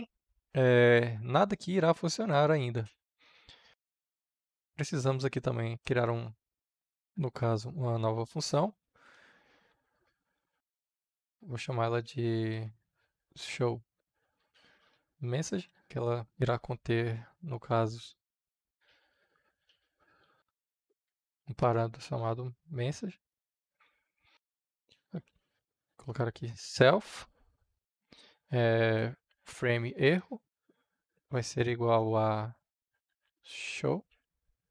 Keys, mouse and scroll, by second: 3.0-5.8 drag, 5.8 Return, 8.4-10.5 typing, 11.7-16.2 typing, 18.5-21.6 typing, 21.8 Right, 22.9 shift+/, 23.2 Return, 24.9 s, 25.3 l, 26.0 f, 27.1 shift+., 28.6-29.9 typing, 30.0 Return, 31.2 shift+., 32.5-33.8 typing, 34.2 Return.